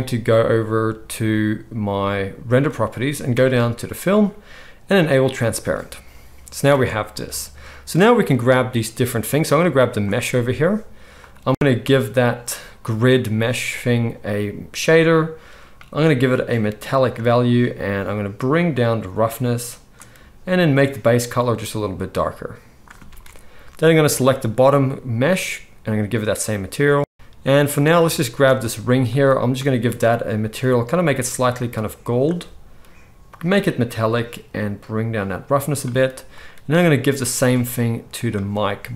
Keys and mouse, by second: 2.5-3.8 drag, 5.4-9.6 drag, 6.6 alt+a, 9.7-11.1 drag, 20.8-23.9 drag, 23.0 alt+a, 23.9 middle click, 24.0-25.2 drag, 25.2-27.6 middle drag, 27.1 alt+a, 27.1 z, 27.6-29.1 drag, 29.1-38.9 middle drag, 29.2-30.4 drag, 29.2-38.9 right drag, 33.2-36.4 drag, 37.2-38.9 drag.